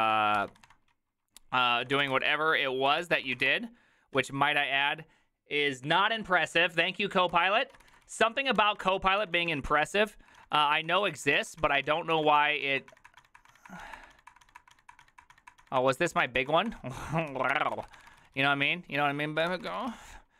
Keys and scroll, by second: 0.0-4.2 typing, 7.3-20.3 typing, 9.3 ctrl+a, 9.4 ctrl+a, 9.7 ctrl+c.